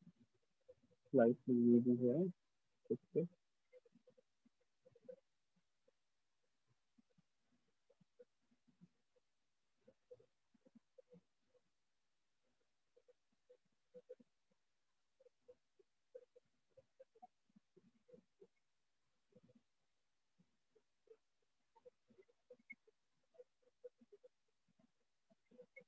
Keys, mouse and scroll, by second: 0.0 right click, 1.7-2.3 scroll, 1.9 click, 2.3-2.6 click, 2.5 click, 3.8 click, 4.3 click, 4.8 click, 5.3 click, 6.2 click, 6.8-9.4 drag, 10.1 click, 10.5 click, 11.0 click, 11.6 click, 12.0 click, 12.6 click, 13.4 click, 13.7 click, 14.2 click, 14.6 click, 15.0 click, 16.0 click, 17.1 click, 17.5 click, 17.9 click, 18.1 click, 18.2 click, 18.7 click, 18.8 click, 18.9 click, 20.2 click, 21.3-21.6 click, 21.5 click, 21.8 click, 21.9 click, 22.8 click, 23.7 click, 24.6 click, 25.4 click.